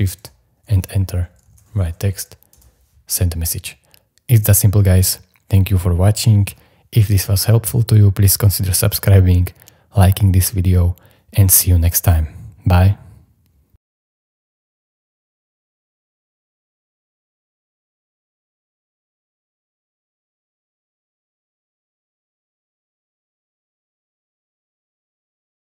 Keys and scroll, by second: 1.2-2.6 typing.